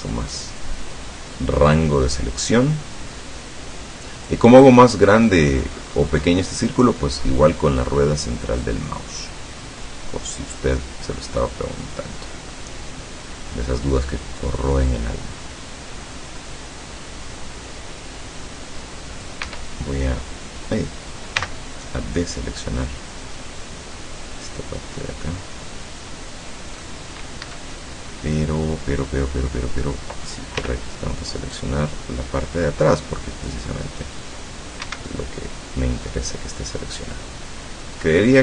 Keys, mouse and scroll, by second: 5.2 scroll up 1, 5.4 scroll down 1, 5.7 scroll up 1, 5.8 scroll down 1, 5.9 scroll up 1, 6.1 scroll down 1, 6.2 scroll up 1, 6.4 scroll down 1, 6.5 scroll up 1, 6.7 scroll down 1, 7.0 scroll up 2, 7.2 scroll down 2, 8.7-19.5 drag, 19.5 Escape, 21.4 c, 21.8-22.2 scroll up 2, 22.6-23.0 scroll up 1, 23.6-27.1 middle drag, 27.4 Escape, 27.8-30.1 middle drag, 30.6 c, 31.6-33.8 drag, 34.9 Escape, 35.1-38.4 middle drag.